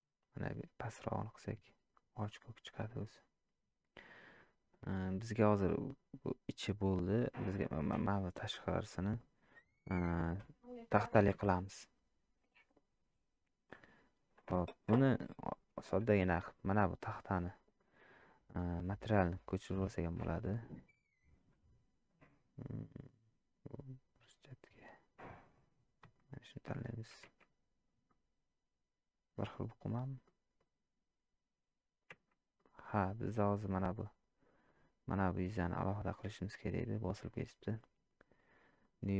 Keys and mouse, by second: 4.4 middle click, 5.9 click, 7.5 click, 8.1 shift+click, 10.7 shift+click, 16.2 middle click, 17.8 middle click, 19.1 click, 28.1-29.4 middle drag, 29.5 middle click, 30.2-30.6 middle drag, 32.6 middle click, 37.1-39.1 drag.